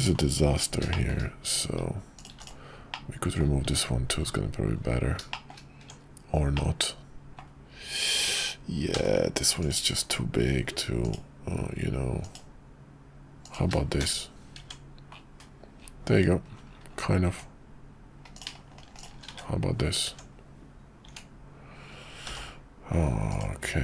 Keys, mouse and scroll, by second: 0.9 shift+middle click, 1.1 shift+scroll down 1, 2.3 x, 2.9 middle click, 3.4 scroll down 1, 3.6 Tab, 5.3 shift+middle click, 6.5 middle click, 8.9 k, 14.6 Tab, 19.4 1, 20.1 Tab, 22.2 k.